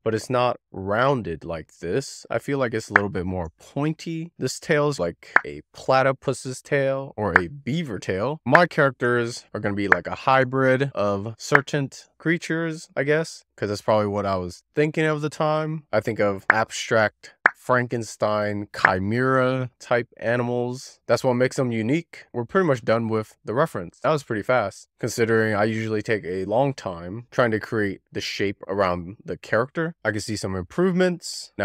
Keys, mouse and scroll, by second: 0.1 Left, 0.4-1.0 Left, 1.3 Left, 1.6 Left, 1.9 Left, 2.4 click, 4.2 click, 5.0 click, 6.9 shift+middle click, 9.4 k, 9.6 shift+middle click, 9.7 k, 10.7 scroll down 2, 10.9 click, 11.3 click, 12.9 right click, 13.1 shift+click, 13.2 right click, 13.5 k, 14.2 click, 14.3 click, 14.7 click, 15.2 click, 15.4 z, 15.6 click, 15.7 click, 15.9 click, 16.1 click, 18.5 click, 20.4 click, 20.8 Left, 20.9 Left, 21.5-22.0 Left, 22.3-22.7 scroll down 2, 23.1-24.0 scroll down 4, 24.0 shift+middle click, 24.7-25.8 scroll down 4, 30.1 Tab, 31.4 shift+middle click.